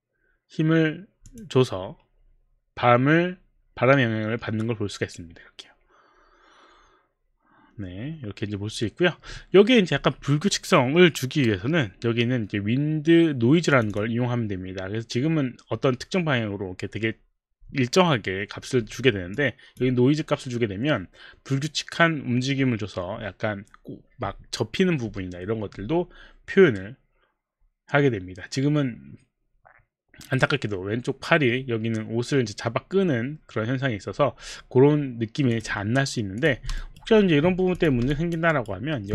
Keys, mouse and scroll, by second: 1.2 click, 13.7 click, 13.9 click, 14.2 click, 19.4 click, 35.5 click, 36.3 click, 37.1 alt+right click, 37.1 click, 37.2 alt+middle click, 37.8 click, 37.8 alt+middle click, 38.1 alt+click, 38.5 alt+right click, 38.8 alt+right click, 39.0 alt+middle click.